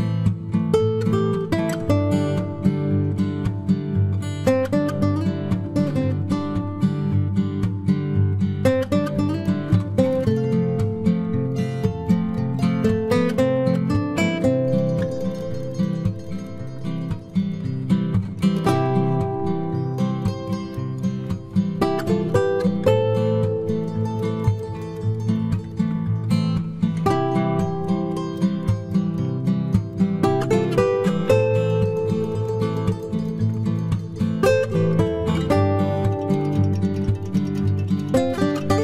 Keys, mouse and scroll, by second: 1.6 c, 7.9 middle click, 9.9 middle click, 10.1 c, 12.4 c, 12.8-14.4 right drag, 14.4 click, 15.8 i, 16.8 z, 17.1-18.3 middle drag, 18.3-20.2 drag, 19.6 ctrl+b, 21.5 KP_3, 22.2 ctrl+s, 22.7 Tab, 24.4 z, 26.1-28.0 middle drag, 27.0 Tab, 28.0-29.7 right drag, 29.7-31.5 middle drag, 29.9 c, 35.2 ctrl+Tab, 38.4 right click, 38.4 k.